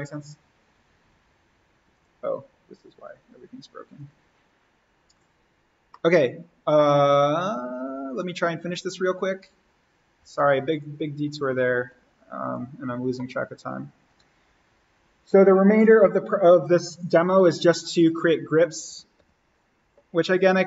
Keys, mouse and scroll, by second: 1.9 click, 2.9 Delete, 3.9 click, 5.9 middle click, 6.1 scroll, 7.5-10.2 drag, 12.4 click, 17.6 click, 18.7 alt+s, 19.1 alt+n.